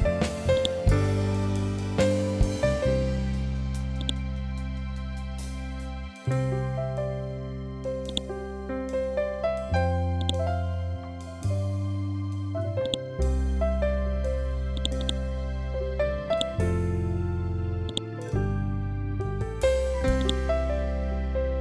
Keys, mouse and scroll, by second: 7.6-9.6 drag, 12.3-21.6 drag.